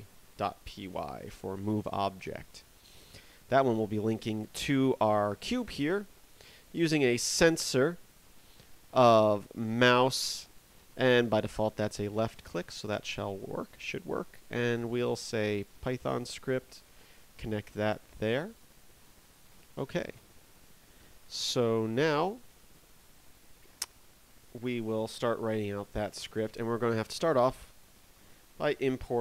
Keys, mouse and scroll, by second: 3.4 right click.